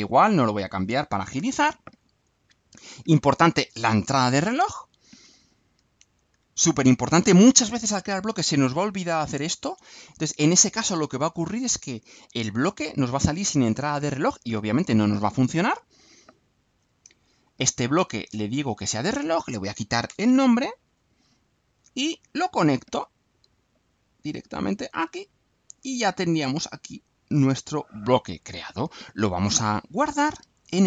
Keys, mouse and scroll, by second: 1.5 click, 4.6-5.7 drag, 5.9 ctrl+c, 6.4 ctrl+v, 6.9-8.3 ctrl+drag, 13.0-14.4 drag, 15.5 click, 17.0 click, 18.6 click, 19.3 click, 20.1 BackSpace, 20.9 click, 21.9-23.1 drag, 24.1-25.1 drag, 25.6-28.0 drag, 29.8 click.